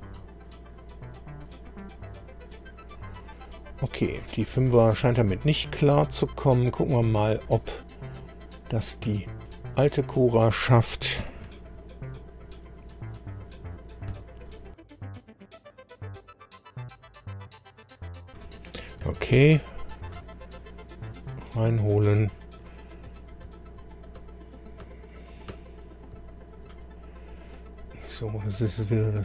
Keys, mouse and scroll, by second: 2.9 click, 4.3-7.7 middle drag, 4.9-7.7 right drag, 9.4 click, 11.2 ctrl+alt+b, 14.1 b, 19.4 ctrl+o, 28.0-28.4 scroll down 1, 28.5-28.8 scroll down 1.